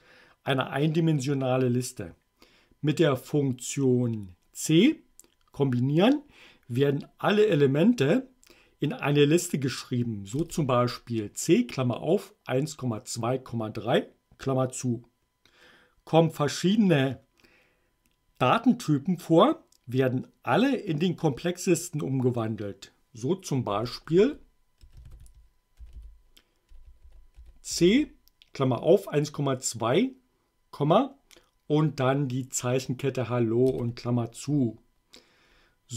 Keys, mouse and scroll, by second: 10.4 Return, 23.7 Up, 24.2 Left, 24.8-27.8 typing, 33.7 Return.